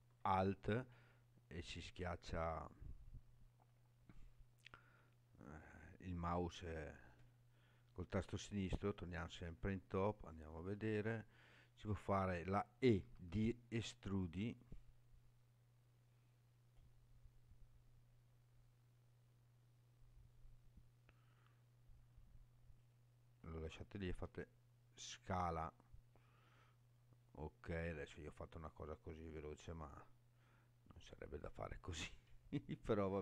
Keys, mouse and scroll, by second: 2.6 scroll down 3, 8.5 KP_7, 10.1 shift+middle click, 11.0 scroll up 2, 11.5-13.2 scroll down 2, 13.2 e, 22.8 right click, 24.1 s, 31.0 click, 31.6-32.2 scroll up 4, 32.9 scroll down 2.